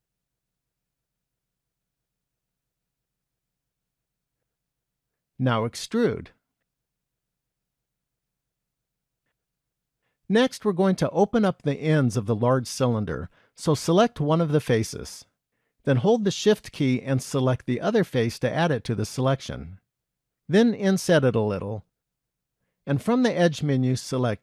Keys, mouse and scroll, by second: 1.7 KP_1, 2.7 shift+middle click, 5.0 e, 7.6-8.9 scroll down 3, 8.9 shift+middle click, 10.5 middle click, 14.2 click, 15.5 middle click, 18.0 shift+click, 23.9 click.